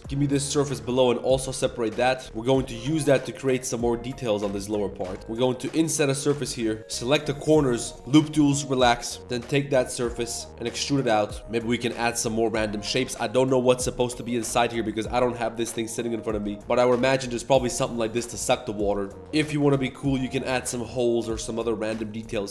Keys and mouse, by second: 0.4-3.7 typing, 0.8 Tab, 0.9 click, 2.1 shift+middle click, 2.2 Tab, 2.5 middle click, 4.5 ctrl+z, 5.2 ctrl+z, 5.2 i, 5.6 1, 6.1 middle click, 6.6 shift+click, 6.8 ctrl+z, 7.0 click, 7.4 w, 9.2-15.3 typing, 16.3 shift+click, 17.3 e, 18.4 click, 18.9 shift+middle click, 19.2 Tab, 19.2 2, 19.5 ctrl+b, 21.2 2.